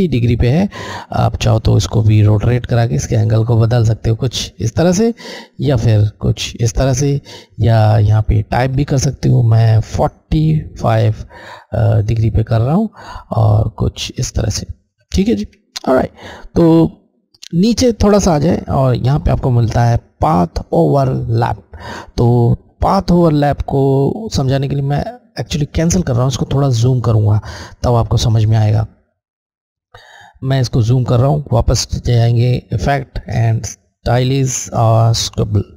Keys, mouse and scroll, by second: 1.5 click, 8.0 click, 12.1 click, 26.3 click, 26.5 click, 28.2 alt+scroll up 1, 29.7 space, 30.2 space, 31.6 click, 34.9 click.